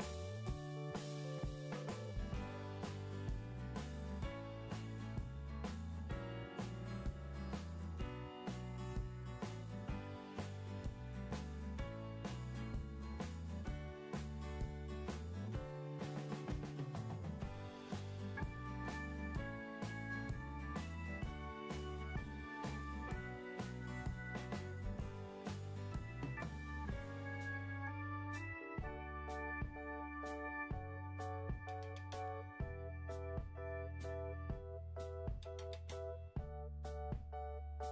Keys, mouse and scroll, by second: 0.0-0.3 typing.